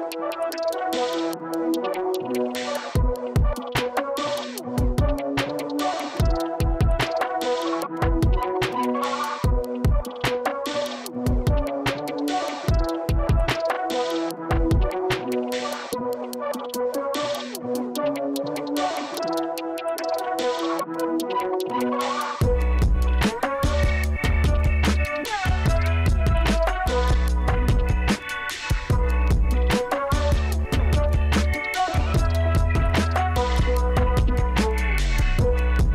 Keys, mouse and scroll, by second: 1.2 super+click, 8.4 super+click, 15.4 super+click, 16.5 super+click, 20.4 super+click, 21.5 super+click, 28.3 super+click, 33.2 super+click, 33.9 super+click, 35.0-35.9 super+drag.